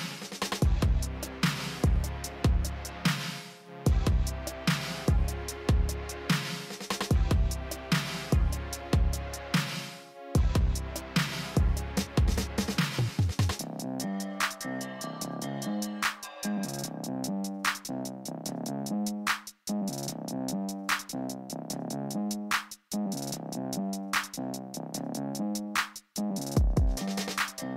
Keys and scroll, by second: 2.9 shift+s.